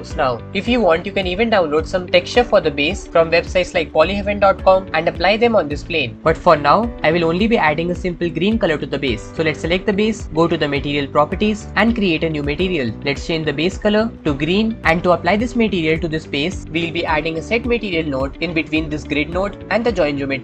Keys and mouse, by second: 9.8 click, 12.7 click, 16.6 ctrl+shift+z, 18.9-20.3 drag.